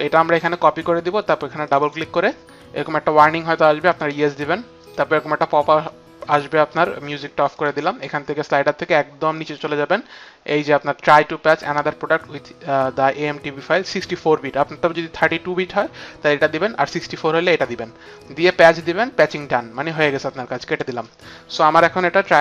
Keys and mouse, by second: 1.9 click.